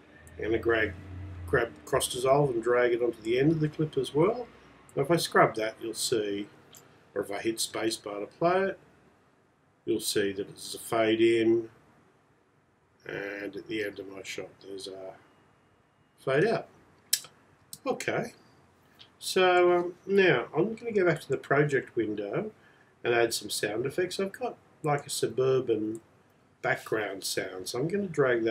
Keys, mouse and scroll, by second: 0.8 click.